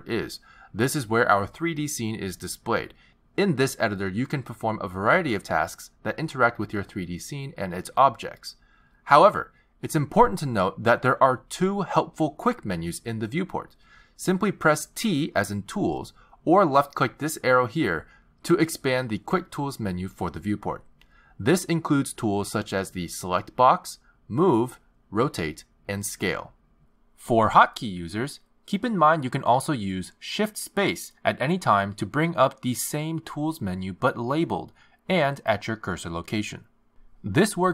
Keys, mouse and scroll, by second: 3.8 click, 5.2 click, 6.2 click, 7.1 click, 15.5 t, 17.8 t, 20.1 click, 30.7 shift+space, 34.2 shift+space.